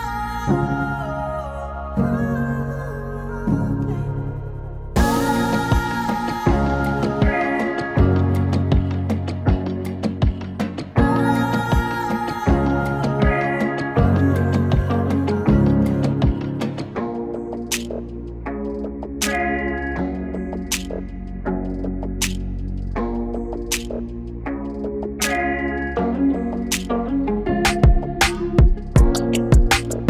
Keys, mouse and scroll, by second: 2.4-3.9 drag, 5.5 click, 10.2 click, 17.6 4, 17.6 click, 20.0 click, 20.7 scroll up 1, 20.8 click, 22.9 ctrl+c, 24.1 click, 24.1 click, 25.9 ctrl+v, 27.0 click.